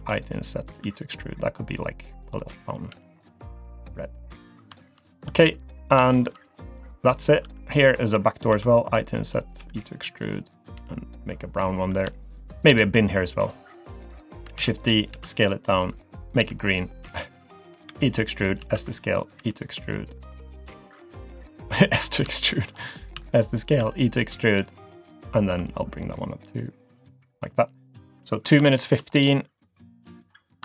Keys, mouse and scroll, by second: 0.8 e, 2.9 g, 4.3 click, 4.5 scroll down 1, 4.8 shift+middle click, 5.3 Tab, 5.7 middle click, 6.1 shift+middle click, 6.3-6.7 scroll down 2, 6.7 middle click, 7.2 click, 7.4 Tab, 7.6 click, 8.5 i, 9.6 e, 11.5 g, 12.1 shift+middle click, 12.7 click, 13.8 click, 14.6 shift+d, 15.1 s, 16.4 g, 17.9 e, 18.6 s, 19.4 e, 22.0 scroll up 2, 22.3 shift+middle click, 23.1 s, 23.8 e, 25.5 2, 25.7 click, 26.1 click, 28.4 scroll down 2, 28.7 shift+middle click, 29.1-30.4 scroll up 1, 30.4 click, 30.4 scroll up 1.